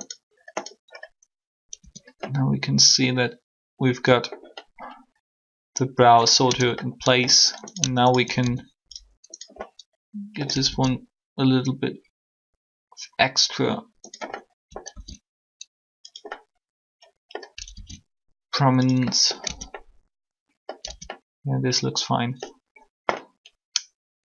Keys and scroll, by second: 1.8 Tab, 6.4 Tab, 19.4 Tab, 20.8 Tab.